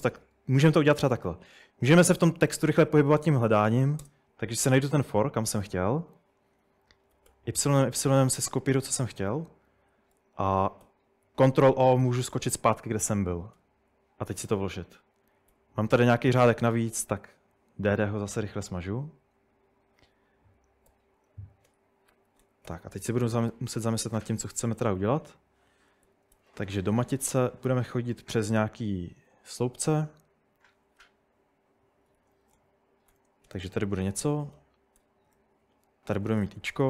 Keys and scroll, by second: 2.3-3.7 typing, 4.0 Return, 7.1 typing, 10.8 ctrl+o, 13.6 p, 15.3-17.2 typing, 20.9-25.0 typing, 22.1 Escape, 23.2 Escape, 26.1-28.8 typing, 26.3 Tab, 32.3-35.3 typing, 36.5-36.8 typing.